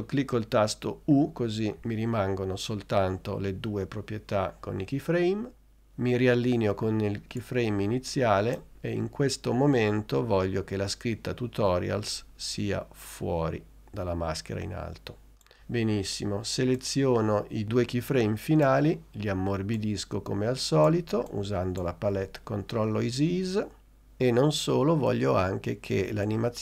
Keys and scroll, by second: 1.5 u.